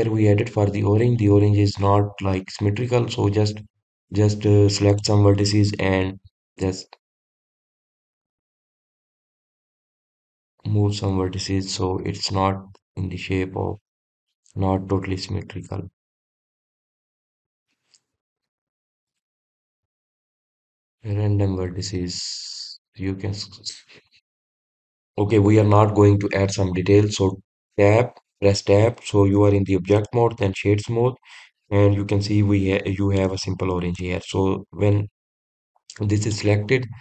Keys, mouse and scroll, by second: 0.0-0.5 scroll down 1, 0.5-2.5 middle drag, 2.5 click, 3.6-6.4 middle drag, 6.4 click, 11.7 click, 12.5 click, 13.5 g, 15.1 click, 17.4 click, 18.5-19.7 middle drag, 19.7 click, 21.9 click, 23.6 middle click, 31.5-32.6 right drag, 32.6-35.0 middle drag, 35.0-35.5 scroll down 3, 35.5-37.0 scroll up 2.